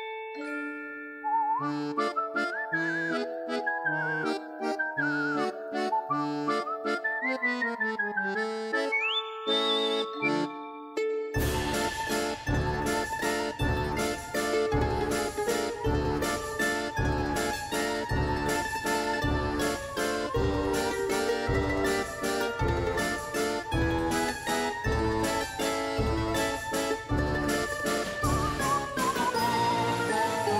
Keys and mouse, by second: 0.0 s, 2.4 Tab, 2.9 Tab, 3.0 click, 3.1 alt+click, 3.3 s, 3.6 Tab, 3.7 click, 4.2 Tab, 4.7 alt+shift+click, 4.8 s, 5.4 Tab, 5.7 click, 6.8 Tab, 7.3 s, 8.2 s, 8.4 alt+click, 8.6 s, 9.3 click, 9.7 click, 10.2 shift+click, 10.4 3, 10.5 click, 10.8 Delete, 11.2 click, 11.4 Delete, 11.6 click, 11.8 click, 12.3 r, 12.9 click, 13.4 3, 13.5 2, 14.8 r, 15.3 click, 15.3 space, 15.7 s, 16.7 click, 17.0 click, 17.4 alt+click, 17.5 f, 17.6 click, 17.8 click, 18.0 click, 18.3 click, 18.8 3, 19.1 click, 19.4 click, 19.9 click, 20.6 click, 20.9 click, 21.4 Tab, 21.8 Tab, 22.1 ctrl+r, 23.2 ctrl+z, 23.7 click, 24.0 click, 24.4 click, 25.2 s, 25.9 s, 26.8 click, 27.4 click, 27.5 click, 28.2 click, 28.4 click, 28.8 Tab, 29.2 click, 29.6 click, 30.1 r, 30.4 click.